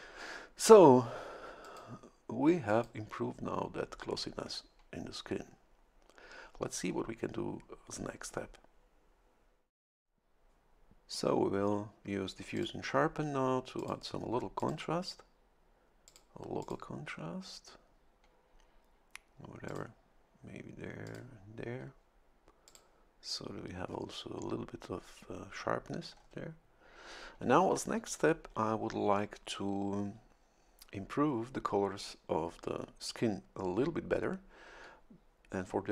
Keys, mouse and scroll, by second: 1.6 click, 2.7 click, 12.5 click, 13.8 click, 14.6 click, 16.1 click, 16.6 click, 19.7 click, 21.0 click, 22.6 click, 23.9 scroll up 1, 26.1-26.4 scroll down 2.